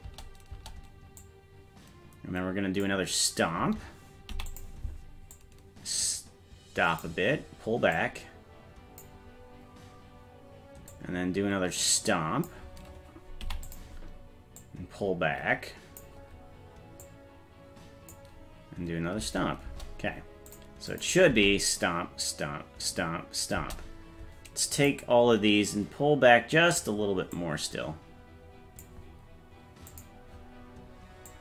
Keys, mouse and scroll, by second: 0.1 space, 0.5 space, 1.2-2.9 drag, 4.3 i, 5.4-7.1 drag, 8.0-9.0 drag, 9.7-10.1 scroll down 2, 10.9-12.5 drag, 13.4 i, 14.6-16.0 drag, 17.0-18.1 drag, 19.2 space, 19.7 space, 20.5 click, 20.9 click, 21.3 space, 23.6 space, 24.8 click, 27.4-28.9 drag, 29.9 click, 31.3-31.4 drag.